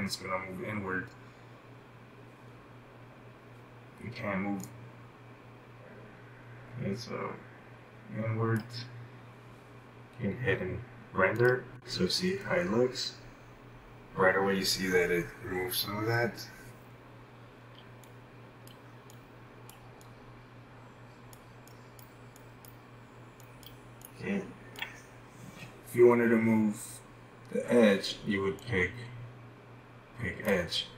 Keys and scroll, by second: 17.7-19.2 typing, 21.8-22.8 typing.